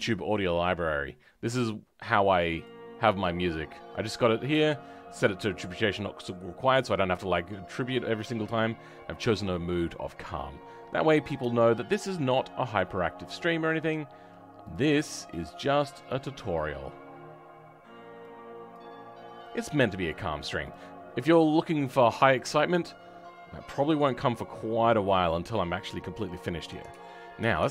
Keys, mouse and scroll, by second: 21.0 scroll up 2, 22.1-25.1 middle drag, 26.5 scroll down 2.